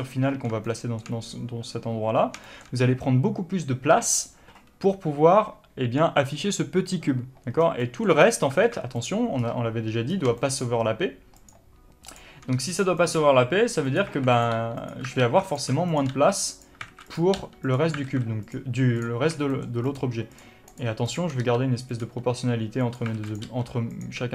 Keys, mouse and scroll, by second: 1.0-9.3 shift+middle drag, 3.2-3.6 scroll up 1, 7.9 scroll down 1, 8.6-8.9 scroll up 1, 8.9 alt+a, 9.3 click, 9.7-10.4 scroll up 1, 10.4 scroll down 1, 10.7 shift+middle click, 11.7 shift+click, 12.4 shift+click, 12.8 s, 13.4 click, 13.4 g, 14.5 alt+a, 14.6 click, 14.8 g, 15.5 alt+a, 15.8 click, 16.2 shift+click, 16.4 g, 17.2 alt+a, 17.4 click, 17.6 g, 18.1 click, 18.4 alt+a, 18.8 click, 19.3 click, 19.6 scroll down 1, 19.8 shift+middle click, 20.2 shift+click, 20.6 shift+click, 21.0 shift+click, 21.4 shift+click, 21.7 s, 23.5 alt+a, 23.6 click, 23.8 g, 24.2 click.